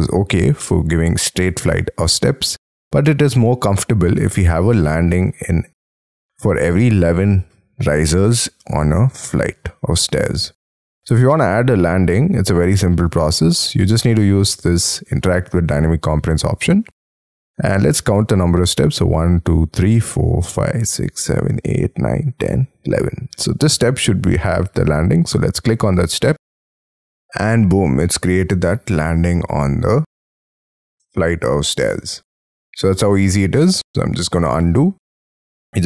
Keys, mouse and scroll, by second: 2.7 scroll up 3, 3.4 middle click, 16.6-17.2 scroll up 8, 17.2-17.9 scroll down 7, 18.2 scroll down 1, 18.4 scroll up 1, 23.4-24.2 scroll up 13, 27.4-28.6 scroll down 22, 28.8 scroll up 2, 29.0 middle click, 35.0 ctrl+z.